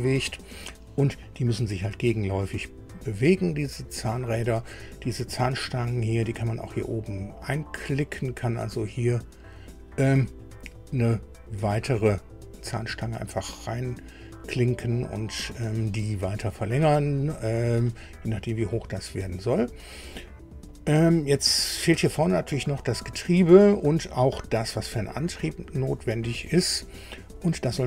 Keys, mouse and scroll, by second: 4.6 scroll down 2, 5.3 shift+middle click, 8.9 scroll up 2, 10.2-10.8 scroll up 4, 11.8 scroll down 2, 16.0 scroll down 1, 16.9 middle click, 17.9 middle click, 19.9-20.2 scroll up 1, 20.6 middle click, 21.4 shift+middle click, 22.2 middle click, 23.1-24.2 drag, 24.5 click.